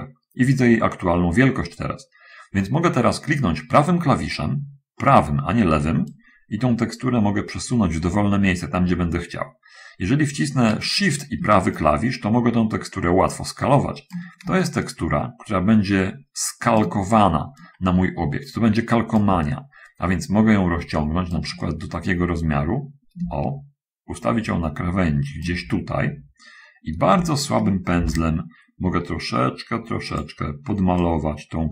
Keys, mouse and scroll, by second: 6.4-11.1 right drag, 12.1-14.6 shift+right drag, 15.2-16.9 shift+middle drag, 17.9-19.7 middle drag, 19.8-21.4 shift+middle drag, 21.8-23.5 shift+middle drag, 23.5-25.3 shift+right drag, 25.3 shift+middle click, 28.3 shift+f, 31.3-31.7 drag.